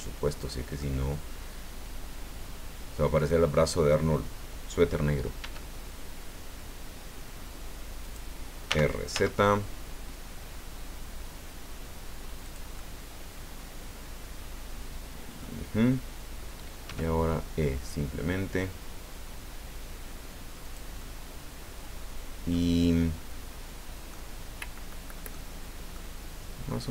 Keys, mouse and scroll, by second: 0.4 click, 0.8 middle click, 1.3-3.3 drag, 5.4 e, 8.0 click, 8.7 r, 9.1 z, 12.4 click, 12.8-15.6 drag, 16.8 e, 20.6-22.6 drag, 24.1-25.5 drag, 25.9 click.